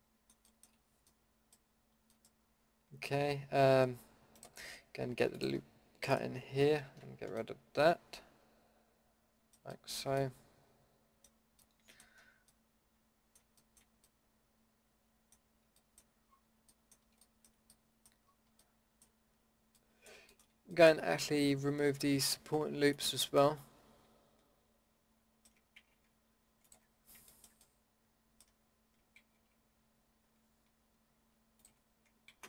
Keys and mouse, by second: 5.3-6.9 drag, 6.9 ctrl+x, 7.6-7.9 middle drag, 16.2-17.7 middle drag, 17.7 drag, 17.8 middle click, 17.9 click, 18.0 middle drag, 18.3-18.6 drag, 18.6 middle click, 22.9-24.6 middle drag, 25.8 ctrl+z, 29.2 ctrl+z, 32.3 ctrl+z.